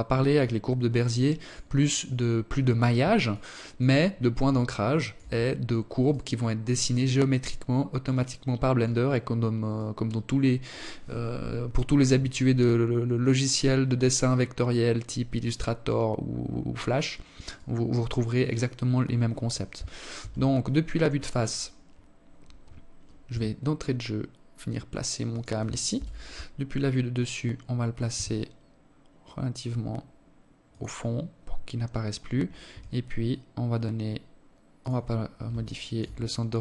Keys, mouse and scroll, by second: 1.8 alt+click, 3.2 alt+shift+click, 4.6 right click, 5.4 right click, 6.6 right click, 7.3 right click, 8.2 right click, 16.0 right click, 16.8 right click, 18.6 KP_1, 21.8 g, 24.4 KP_7, 26.6 g, 31.2 r, 34.1 alt+shift+click, 34.7 scroll down 5, 35.1-35.7 scroll up 4, 35.8 scroll down 1, 36.4 right click.